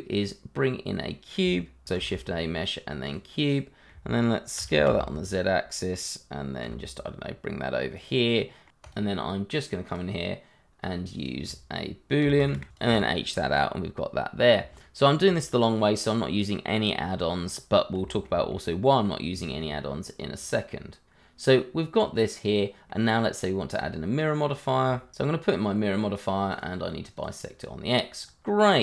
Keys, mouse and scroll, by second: 1.9 shift+a, 3.0 click, 3.4 middle click, 4.5 s, 4.8 z, 5.8 click, 6.6 g, 7.9 click, 8.3 middle click, 8.7 click, 10.5 b, 10.6 o, 10.8 l, 11.2 click, 12.8 h, 13.2 middle click, 14.5 middle click, 14.7-15.2 scroll up 1, 15.2 click, 16.5 middle click, 18.0 middle click, 18.0 shift+middle click, 19.4 shift+middle click, 19.4 middle click, 20.4 click, 22.9 middle click, 23.8 click, 24.3 i, 24.4 r, 25.0 click, 27.6-28.2 scroll down 1, 28.2-28.8 scroll up 1.